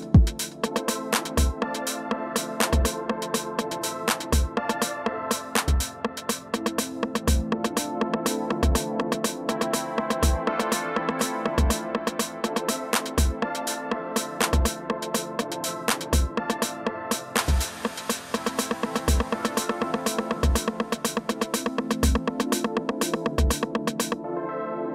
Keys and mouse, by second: 16.1 click, 18.8 click.